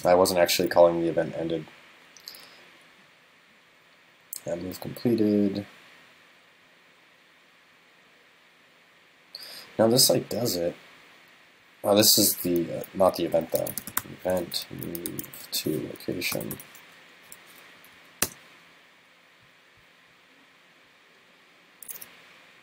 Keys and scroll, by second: 13.4 super+..